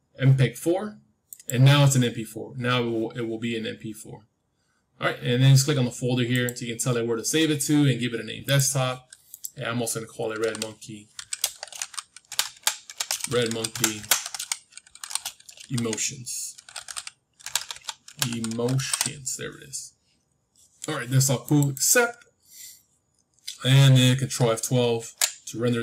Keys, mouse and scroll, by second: 6.2-8.2 drag, 25.0 ctrl+F12.